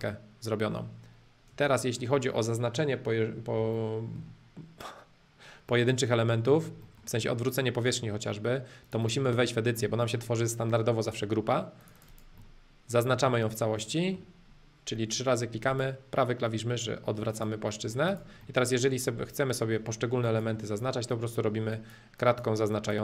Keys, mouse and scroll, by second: 0.0-1.5 middle drag, 1.5 space, 1.8-3.6 middle drag, 3.8-7.8 shift+middle drag, 8.8 click, 9.4-11.4 middle drag, 11.8 click, 12.4-14.4 middle drag, 15.7-17.3 right drag, 17.3 click, 17.7 middle click, 18.1 click, 18.4 middle click, 18.8-19.3 scroll up 2, 19.3 click, 20.2-21.6 ctrl+drag, 21.7-23.0 ctrl+drag.